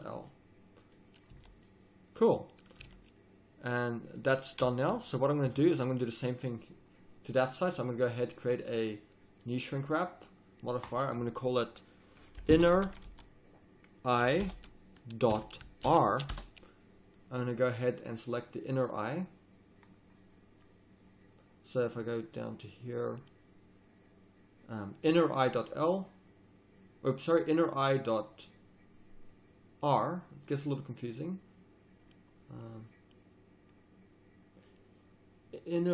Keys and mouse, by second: 1.3 z, 2.8 z, 7.4-12.7 drag, 12.7 n, 17.7-35.9 drag.